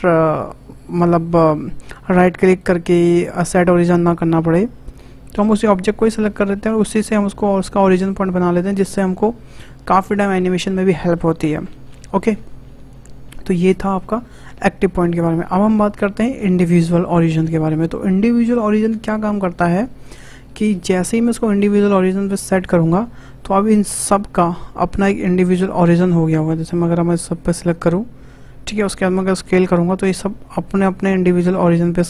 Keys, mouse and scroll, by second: 2.4-6.4 right drag, 6.4 shift+click, 7.3 s, 13.8-16.9 drag, 20.0 scroll down 2, 20.5-21.5 shift+middle drag, 21.5-24.7 drag, 25.8 click, 29.5 s.